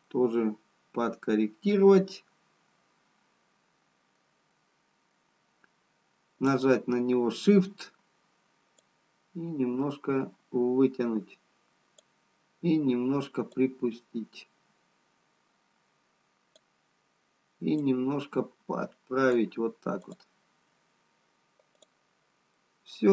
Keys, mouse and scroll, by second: 1.8 middle click, 6.9 middle click, 6.9 click, 13.4 click, 20.0 click.